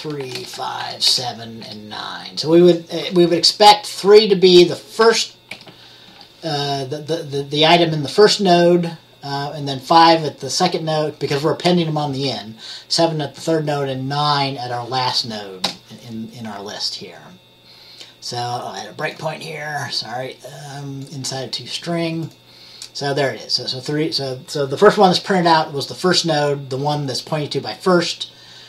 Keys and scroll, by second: 0.3 5, 0.5 Return, 0.9 7, 1.2 Return, 1.7 9, 5.1 Return, 5.6 -, 6.2 1, 15.7 Return.